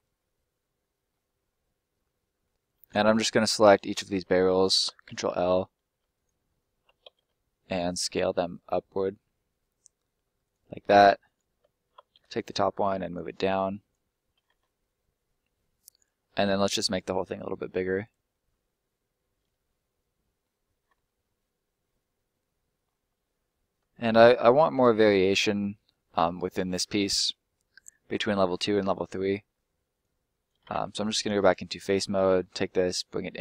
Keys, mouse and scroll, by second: 1.2 scroll down 1, 1.5 middle click, 2.7 right click, 3.2 ctrl+right click, 5.0 ctrl+l, 6.1 ctrl+right click, 7.7 s, 10.4 click, 10.7 middle click, 11.3 right click, 11.5 ctrl+right click, 12.1 ctrl+l, 13.1 click, 14.0 middle click, 14.7 scroll down 1, 14.7 middle click, 16.5 s, 17.9 click, 18.3 middle click, 21.0 middle click, 22.8-23.4 scroll up 1, 23.4 middle click, 24.7 scroll up 1, 24.9 middle click, 29.4-29.8 scroll up 1, 29.8 right click, 30.7 ctrl+right click, 31.4 click, 31.7 right click, 32.0 middle click, 32.7 click.